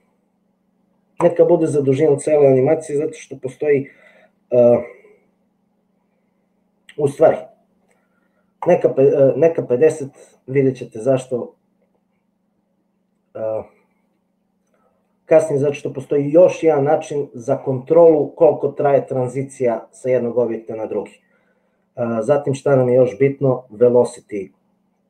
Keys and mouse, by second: 1.6-9.0 drag.